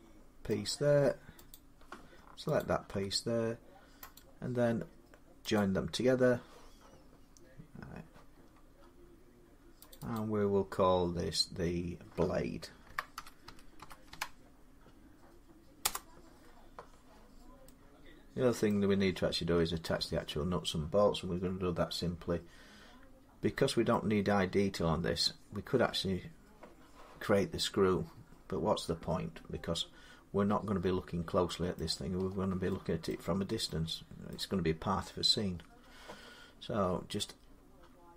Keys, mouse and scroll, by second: 0.3 middle click, 1.3 click, 2.4 shift+click, 4.0 right click, 5.4 click, 8.1 scroll down 4, 8.6-9.0 scroll, 9.7 click, 10.0 click, 12.7-13.9 typing, 13.6 middle click, 15.6 Return, 18.5-23.6 middle drag, 25.0 middle click, 25.6-26.0 scroll down 5, 26.0 scroll up 6, 27.4 scroll down 4, 30.3 scroll, 31.6 middle click, 31.6-32.1 scroll down 8, 32.5 scroll up 5, 32.9 middle click, 33.1 scroll down 3, 33.4 scroll up 1, 34.1 middle click, 35.3-36.0 scroll.